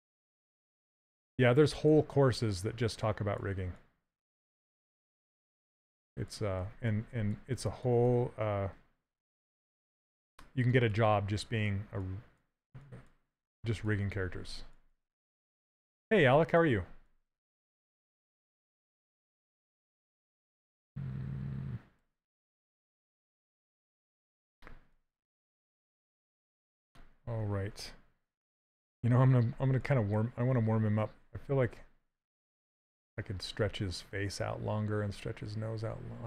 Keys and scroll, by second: 1.4 s, 10.4 s.